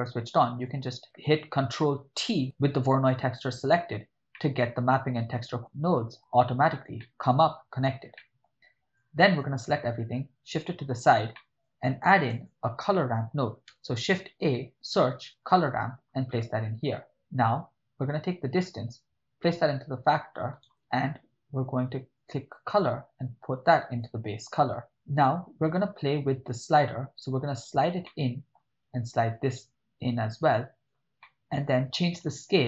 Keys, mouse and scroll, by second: 0.6 click, 4.4 middle click, 5.4 drag, 5.7-6.1 drag, 7.0 middle click, 8.2 middle click, 9.0-9.5 drag, 9.9-11.2 drag, 11.3 middle click, 12.1 shift+a, 14.3 BackSpace, 18.3-20.6 drag, 22.2-23.9 drag, 24.8 click, 26.4-27.8 drag, 28.1 ctrl+middle click, 29.4-30.9 drag, 31.2 middle click.